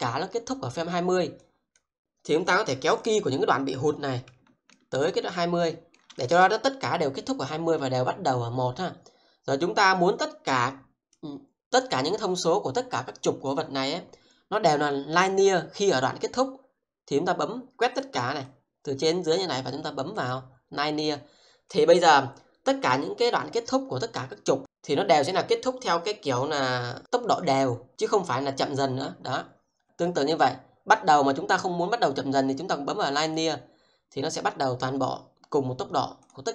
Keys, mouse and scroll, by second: 1.4 click, 3.0 click, 4.7 shift+middle click, 6.2 click, 10.2 click, 29.7 click, 36.2 click.